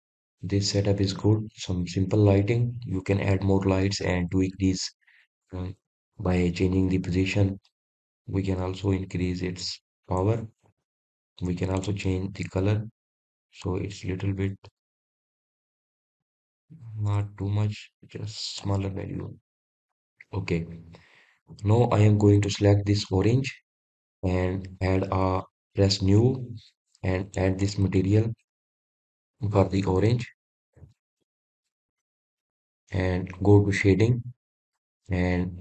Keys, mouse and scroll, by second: 2.6 scroll down 1, 2.8-3.3 scroll up 2, 3.3-3.8 scroll down 1, 3.8 click, 9.9-12.6 drag, 13.5 click, 20.7 click, 21.8-22.6 scroll up 1, 22.6-23.2 scroll down 1, 23.2-24.1 scroll up 1, 24.1 click, 27.3-32.2 drag.